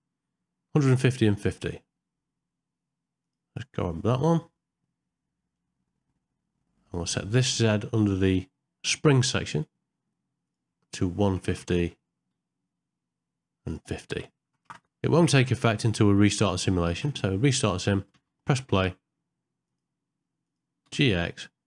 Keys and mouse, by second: 3.2 click, 7.6 click, 10.4-11.6 drag, 13.7 click, 16.4 space, 16.9 shift+Left, 18.2 space, 19.7 click, 20.4 click, 20.9 g.